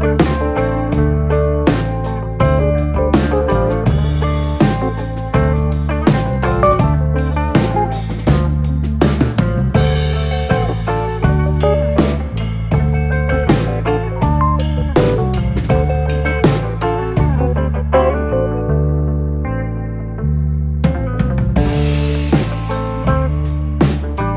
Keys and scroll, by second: 0.5-2.6 typing, 5.5-6.3 typing, 14.2 typing, 15.8 Return, 24.0-24.3 typing.